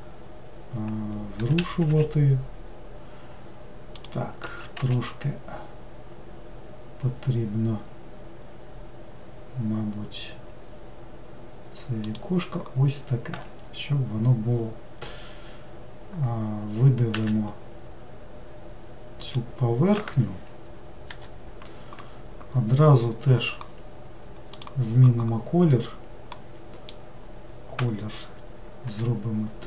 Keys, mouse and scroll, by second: 1.4 g, 4.4 s, 17.1 e, 21.0 l, 26.3-28.8 middle drag, 28.8 g.